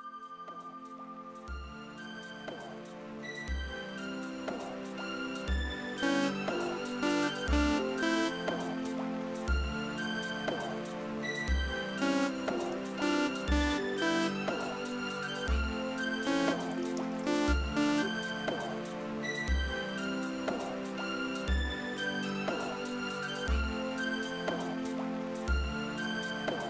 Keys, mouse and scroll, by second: 4.6-5.7 drag, 6.0 space, 8.2 space, 9.7-11.5 drag, 11.9 space, 14.3 space, 15.4 click, 16.2 space, 18.0 space, 19.6 click, 21.1 click, 22.9-24.0 drag.